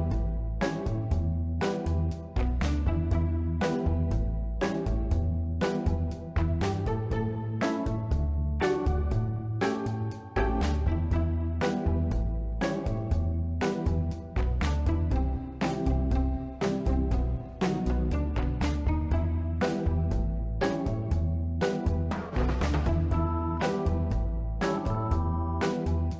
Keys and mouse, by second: 0.0-0.6 middle drag, 1.1-1.7 drag, 2.2 s, 2.3 x, 2.7 click, 3.3 click, 5.1-5.8 drag, 6.2-7.2 middle drag, 7.7-8.4 ctrl+middle drag, 9.4 click, 17.7 middle click, 18.1 middle click, 19.3-21.9 drag, 23.1 click, 23.9 click, 24.8-25.3 shift+middle drag.